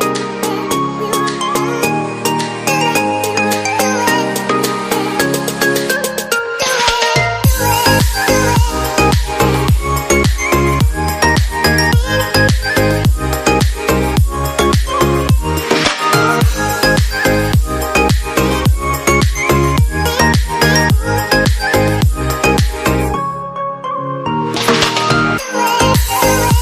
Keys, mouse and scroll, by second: 7.8 ctrl+Right, 16.3 right click, 21.7 shift+Page_Up, 24.3 double click.